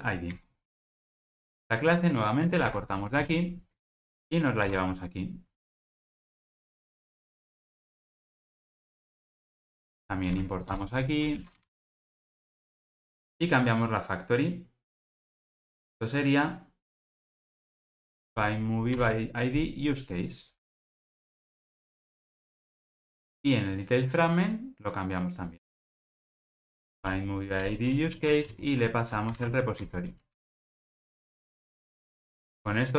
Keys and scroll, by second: 0.4 Return, 0.8 alt+super+l, 1.1 ctrl+alt+o, 2.6 super+x, 4.7 super+v, 6.1 alt+Return, 10.3 alt+Return, 11.6 ctrl+alt+o, 30.6 ctrl+alt+o.